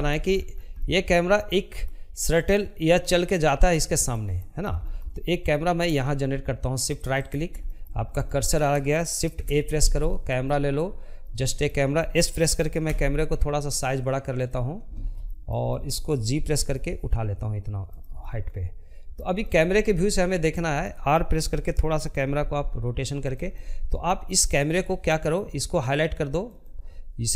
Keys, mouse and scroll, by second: 1.6 scroll down 1, 1.8 middle click, 2.3 scroll up 1, 2.5-4.9 shift+middle drag, 4.9 shift+right click, 5.3 middle click, 5.7 scroll up 1, 6.0-8.1 shift+middle drag, 8.1 shift+a, 8.9-10.6 middle drag, 10.6 s, 13.0-14.3 shift+middle drag, 14.3 g, 15.9-20.1 middle drag, 20.1 r, 21.2-23.0 middle drag, 23.0 click, 24.3 click.